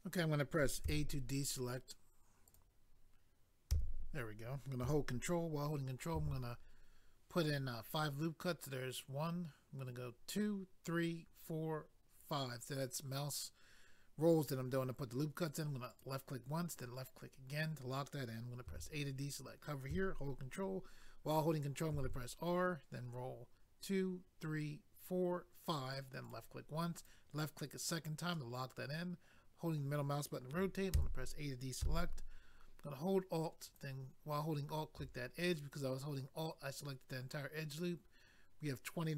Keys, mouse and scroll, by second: 2.5 click, 2.6 click, 3.7 a, 6.1 ctrl+r, 10.1-10.7 scroll up 1, 10.7-11.9 scroll up 2, 12.1-12.7 scroll up 2, 15.9 click, 16.0 click, 16.7 click, 16.8 click, 18.7 a, 21.9 ctrl+r, 23.6-24.2 scroll up 1, 24.2-24.8 scroll up 1, 26.2 click, 27.1 click, 28.3 middle click, 31.0 a, 33.6 alt+click, 33.8 alt+click.